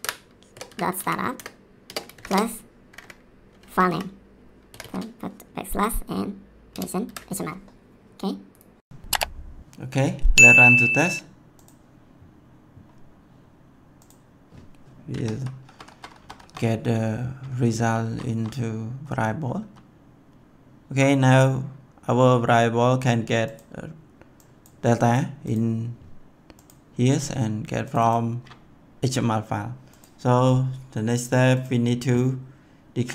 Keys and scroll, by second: 0.0-2.9 typing, 3.9 Left, 4.7 \, 6.7 ctrl+v, 7.0 ctrl+s, 15.1 F11, 15.6 F10, 17.7 F10.